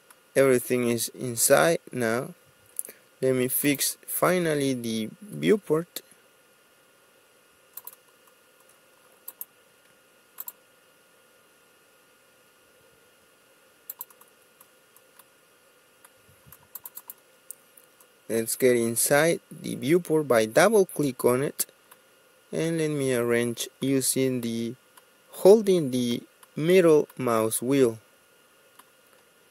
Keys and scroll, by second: 7.2 Escape, 7.2 ctrl+z, 14.6 Escape.